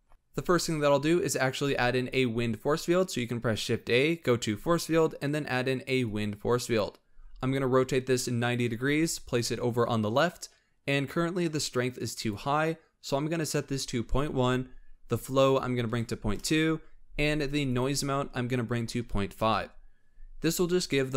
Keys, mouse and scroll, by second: 1.5 shift+a, 7.1 r, 8.7 g, 12.0-15.2 drag, 17.5-20.6 drag.